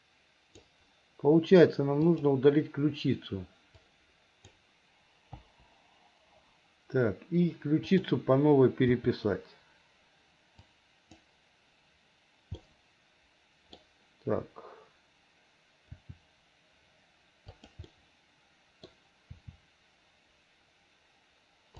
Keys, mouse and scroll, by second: 2.0 click, 3.8 click, 5.5 Delete, 7.8 click, 9.0 r, 12.7-13.8 middle drag, 16.0 r, 17.9-18.9 middle drag, 19.4 r.